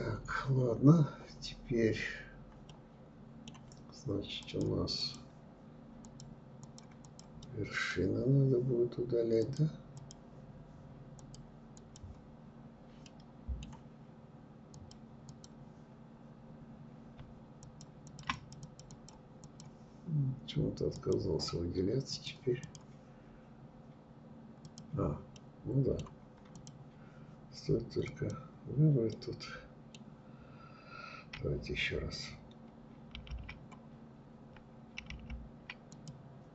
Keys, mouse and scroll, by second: 1.7-3.4 middle drag, 3.4 click, 4.0 click, 5.1 click, 5.6 click, 6.1 click, 6.5 middle click, 7.1-8.5 scroll down 1, 8.5-10.4 drag, 10.8 click, 11.4 scroll down 3, 12.0 scroll down 1, 12.1-13.8 middle drag, 13.8 click, 14.3 click, 15.1 scroll down 2, 15.5 scroll up 1, 16.6 shift+click, 17.1 shift+click, 17.4 click, 17.6 click, 17.9 click, 18.5 click, 20.0-21.8 drag, 23.7 click, 24.4-25.6 middle drag, 25.6 click, 27.1 click, 28.1-31.2 middle drag, 34.9 click, 36.0 click.